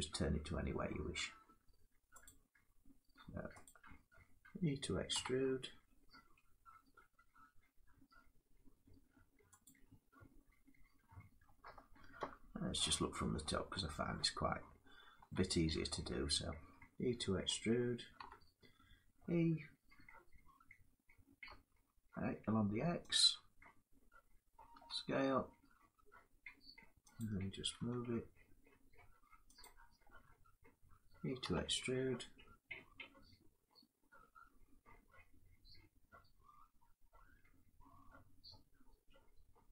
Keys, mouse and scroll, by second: 0.5 middle click, 1.9 click, 9.3 click, 9.7 scroll down 4, 11.1 middle click, 11.9 7, 13.9 shift+middle click, 14.3 scroll up 3, 14.9 scroll, 14.9 scroll up 2, 15.0 shift+middle click, 15.3 scroll, 15.3 scroll up 6, 16.3 scroll, 17.9 e, 21.1 x, 22.8 click, 24.4 s, 26.9 click, 27.6 g, 29.3 click, 29.6-31.0 scroll down 3, 31.1 e.